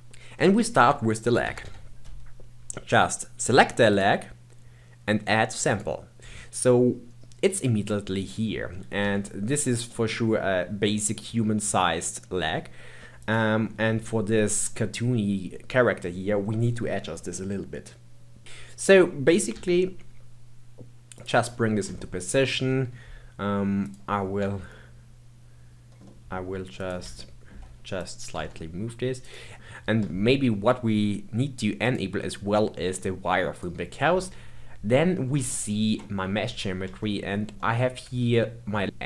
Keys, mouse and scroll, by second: 3.9 click, 5.7-8.7 drag, 9.0 g, 19.5 g, 21.5-21.9 scroll up 2, 21.9 shift+middle click, 22.7 scroll up 2, 23.8 click, 24.4 g, 27.2 shift+middle click, 28.0 click, 28.3 g, 29.5-31.8 scroll down 1, 31.8-34.8 drag, 35.5-37.5 shift+middle drag, 37.5 scroll up 3, 37.6-38.8 shift+middle drag.